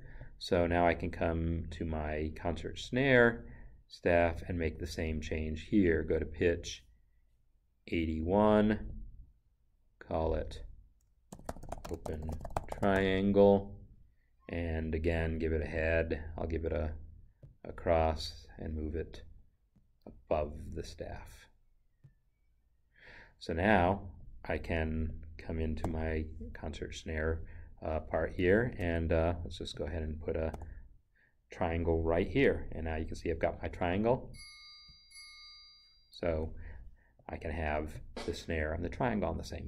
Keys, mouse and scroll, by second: 0.2 click, 1.9 click, 2.8 right click, 8.9 click, 10.5 click, 11.5-12.8 typing, 16.9 click, 20.3 Down, 22.3 click, 25.8 n, 28.8 Escape, 29.7 click, 30.5 n, 34.1 click, 34.3 double click, 34.9 click, 36.3 Escape, 38.0 click.